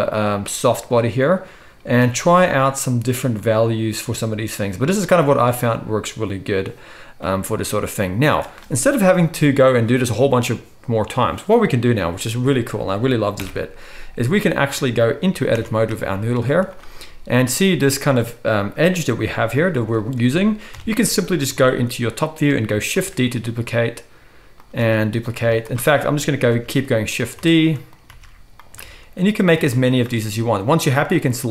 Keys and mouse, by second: 7.1-7.5 middle drag, 7.1-7.5 right drag, 8.1 middle click, 8.1 right click, 13.3 shift+Left, 15.5 Tab, 15.8-19.8 shift+right drag, 16.4 z, 19.3 g, 19.8-24.9 middle drag, 20.6 KP_7, 22.9 shift+d, 24.7 shift+d, 25.4 z, 26.2-27.3 shift+middle drag, 26.5 shift+d, 27.5 shift+d, 28.2 shift+d, 28.9 shift+d, 29.7 shift+d, 31.1-31.5 drag.